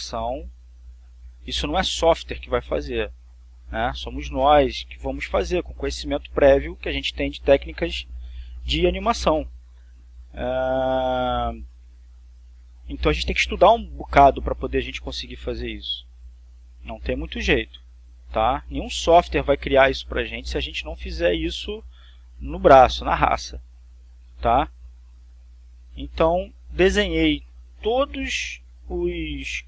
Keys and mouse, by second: 1.2-2.2 drag, 4.0-5.0 drag, 11.4 click, 12.5 click, 13.4-14.4 drag, 17.1-18.1 drag, 19.2-20.3 drag, 21.7 click, 23.5-24.5 drag, 25.2-26.2 drag, 27.2 click.